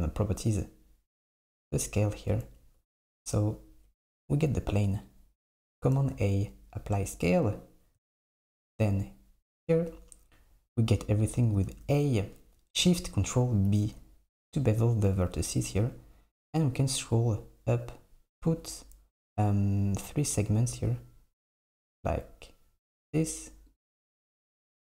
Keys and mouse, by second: 1.8-3.3 drag, 5.0 click, 6.0 a, 8.6 Tab, 10.9 click, 11.7 a, 13.7 ctrl+shift+b.